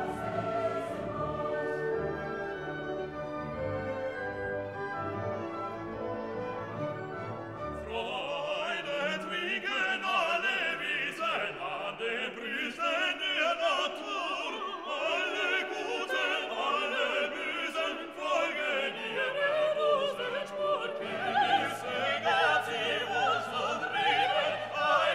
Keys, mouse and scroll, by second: 10.7 scroll down 1, 11.7-19.1 drag, 19.1 scroll up 1, 20.3 click, 21.1 scroll down 1, 21.9-23.4 middle drag, 23.4-25.1 middle drag.